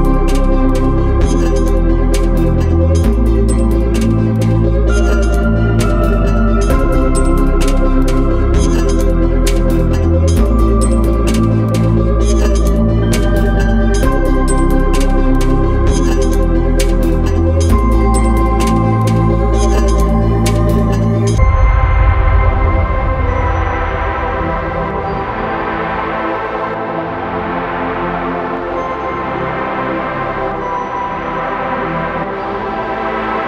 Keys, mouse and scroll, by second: 0.8 shift+click, 3.3 ctrl+p, 11.1 click, 19.0 click, 24.0 shift+click, 28.0 click, 31.9 click.